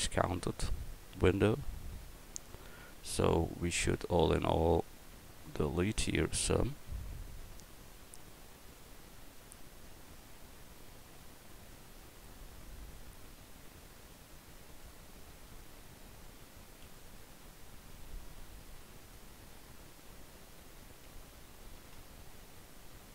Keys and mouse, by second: 4.0 Tab, 5.1 a, 5.5 a, 9.0 l, 12.5 l, 13.5 l, 14.8 l, 16.9 ctrl+z, 19.2 l, 20.1 l, 21.8 ctrl+z.